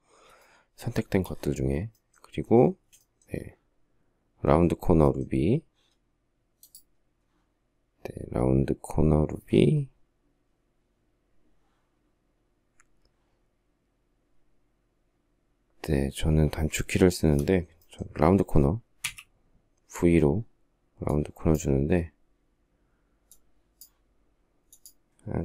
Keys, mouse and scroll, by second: 15.9 Escape, 18.4 v.